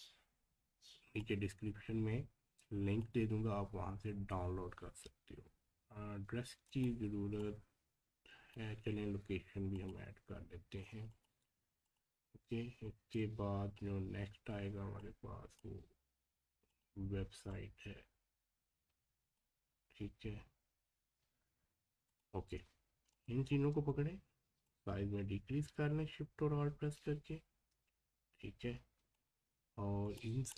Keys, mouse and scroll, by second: 6.7-9.7 drag, 15.0-21.5 drag, 22.1 click, 23.1 shift+click, 24.7-30.0 alt+shift+drag.